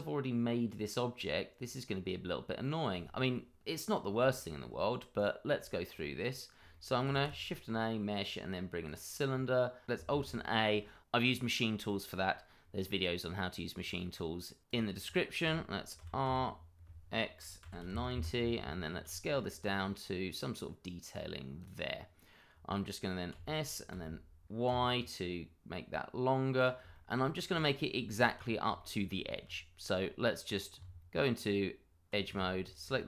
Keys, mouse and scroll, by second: 4.3 shift+middle click, 4.4 middle click, 4.5 shift+middle click, 5.1 click, 5.6 shift+middle click, 5.7 middle click, 5.8 shift+middle click, 6.2 middle click, 6.7 shift+middle click, 7.1 shift+a, 8.8 click, 9.3-9.8 scroll down 1, 10.1 alt+a, 10.7 scroll up 1, 11.8 shift+middle click, 11.9 middle click, 12.0 shift+middle click, 12.2-14.6 scroll up 1, 15.1 double click, 15.9 r, 16.2 y, 17.6 x, 17.8 9, 18.1 Return, 19.0 s, 21.6 click, 21.8-23.1 scroll down 1, 23.3 s, 23.9 x, 24.7 y, 26.5 click, 27.0 middle click, 27.2-27.6 scroll up 1, 27.6 shift+middle click, 28.4-28.7 scroll up 1, 28.7 shift+middle click, 29.2-29.5 scroll up 1, 29.5 middle click, 30.0-30.8 scroll up 1, 30.8 Tab, 32.6 alt+click.